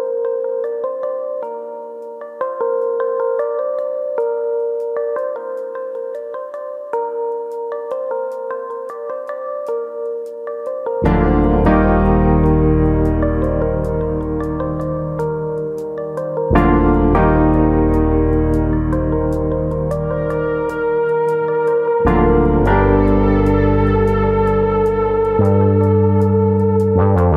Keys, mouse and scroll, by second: 1.1 middle click, 1.6 middle click, 2.5 ctrl+r, 3.5 right click, 3.8 middle click, 4.6 1, 5.1 click, 5.4 shift+click, 6.3 j, 6.6 middle click, 7.3 click, 7.6 shift+click, 8.3 j, 8.8 middle click, 9.2-9.8 scroll down 3, 9.6 shift+middle click, 9.8 middle click, 10.1-10.7 scroll up 2, 10.6 alt+click, 10.9 middle click, 11.7 g, 12.6 right click, 12.8-13.3 scroll down 3, 13.1 shift+middle click, 13.4 middle click, 14.1 middle click, 14.5 shift+middle click, 14.9 click, 15.5 ctrl+click, 16.3 g, 17.3 click, 18.2 alt+click, 19.1 g, 20.1 click, 20.3 middle click, 20.8 middle click, 21.4 ctrl+z, 21.6 middle click, 23.0 g, 24.3 click, 24.5 shift+middle click, 24.7 middle click, 25.0 Tab, 25.2 middle click, 25.6-26.1 scroll down 4, 25.8 middle click, 26.7 scroll up 3, 26.9 middle click, 27.2 Tab.